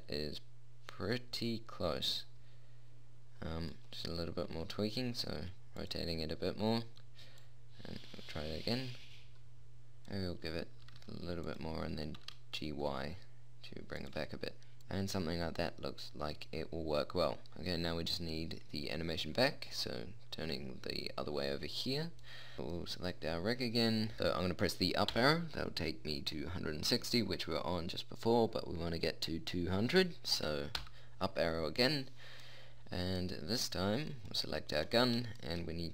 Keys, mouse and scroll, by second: 0.1 middle click, 0.3 middle click, 4.8 r, 7.7 middle click, 11.2 r, 12.3 g, 17.4-19.3 middle drag, 22.9-25.3 drag, 25.5 Up, 31.1 Up, 35.1 middle click.